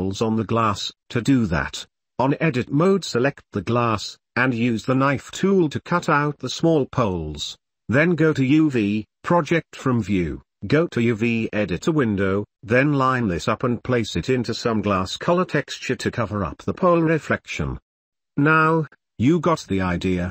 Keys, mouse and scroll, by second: 1.7 n, 2.0 k, 10.0 click, 10.6 middle click, 11.7 click, 12.2 click, 12.7 click, 13.5 g, 14.3 shift+click, 14.7 s, 14.9 r, 15.5 g, 17.5 Tab, 17.6 Tab, 17.9 click, 18.0-18.4 middle drag, 18.4 click, 18.5 middle click, 18.6-19.0 drag, 19.9 ctrl+s, 20.0-20.3 typing.